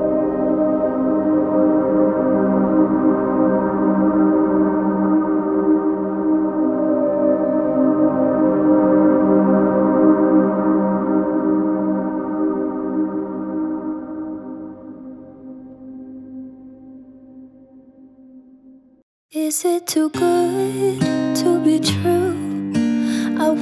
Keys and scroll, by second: 5.4 ctrl+t, 23.1 ctrl+-, 23.4 ctrl+-.